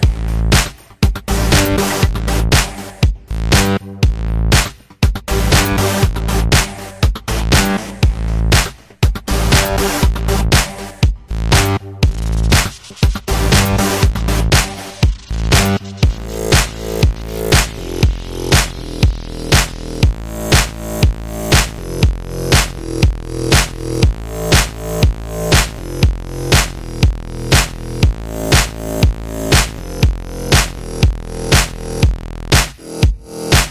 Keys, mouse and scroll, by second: 0.0 alt+right click, 0.1 alt+click, 0.6 f, 0.8 click, 1.0 z, 1.9 alt+right click, 2.0 f, 2.1 alt+click, 2.3 f, 2.4-4.0 drag, 4.0 f, 4.2 click, 4.8 f, 4.9 click, 5.3 alt+middle click, 5.4 alt+right click, 5.6 f, 5.9 click, 6.1 f, 6.4 click, 6.6 ctrl+z, 6.8 click, 7.6 f, 7.7 click, 8.3 alt+right click, 8.5 alt+click, 8.7 alt+middle click, 8.9 alt+click, 9.0 alt+right click, 9.1 alt+middle click, 9.3 alt+shift+click, 9.5 alt+right click, 9.6-10.6 alt+drag, 13.5 alt+click, 13.9 alt+middle click, 14.0 alt+right click, 14.9 alt+click, 15.3 alt+right click, 15.4 alt+click, 15.7 alt+middle click, 15.8 alt+click, 15.9 shift+c, 16.0 f, 16.1 alt+click, 16.2 f, 16.3 alt+click, 17.0 f, 17.1 alt+right click, 17.2-22.2 alt+drag, 22.2 alt+right click, 22.5 alt+middle click, 22.8-25.0 ctrl+drag, 25.0 ctrl+z, 25.1 ctrl+z, 25.3 ctrl+click, 25.8 g, 25.9 click, 26.1 f, 26.3-27.3 drag, 27.2 alt+right click, 27.4 alt+click, 27.7 alt+middle click, 27.8 alt+click, 28.4 alt+middle click, 28.6 alt+right click, 28.9-30.4 alt+drag, 30.4 q, 30.8 alt+middle click, 30.9 alt+right click, 31.0 alt+middle click, 31.2 alt+right click, 31.3 alt+middle click, 31.5 f, 32.0 f, 32.4-33.6 drag, 33.6-33.7 typing.